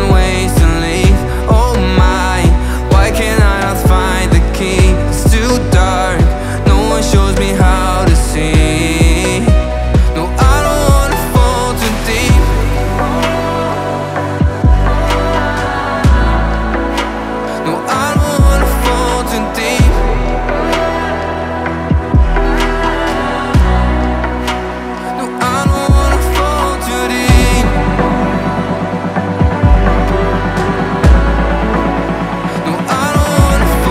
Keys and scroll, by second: 4.6 Up, 8.9 alt+Tab, 11.6 Tab, 12.6 space, 17.0-17.6 typing, 17.8 Return, 19.5 g, 19.6 i, 19.8 r, 20.1 Return, 23.7 Tab, 24.6 ctrl+v, 26.3 Up, 30.6 space, 31.0 alt+Tab.